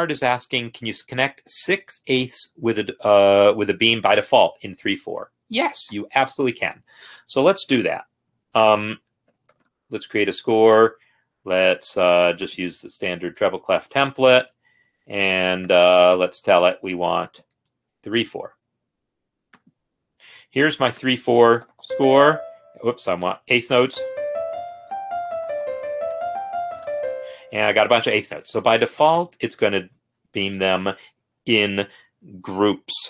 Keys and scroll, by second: 6.0 ctrl+n, 9.4-10.0 typing, 10.0 Return, 15.8 Return, 18.0 Down, 21.6 typing, 23.4-26.8 typing, 27.8 Escape.